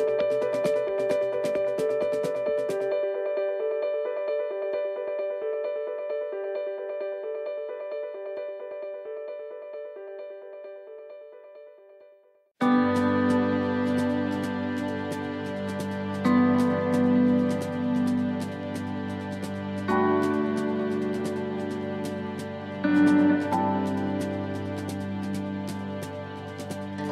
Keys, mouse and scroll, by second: 0.2 l, 1.4 l, 3.0 middle click, 3.0 right click, 3.4 middle click, 3.4 right click, 3.7-4.4 scroll down 2, 4.2 middle click, 5.0 shift+middle click, 5.4 middle click, 5.7 scroll down 1, 6.2 shift+middle click, 6.7-7.2 scroll down 2, 7.0 shift+middle click, 7.4 scroll up 2, 8.4 click, 8.4 scroll up 2, 10.0 shift+right click, 10.6 shift+right click, 11.0 middle click, 11.5 scroll down 1, 12.0 shift+middle click, 12.5 middle click, 15.0 click, 18.5 middle click, 19.2 shift+middle click.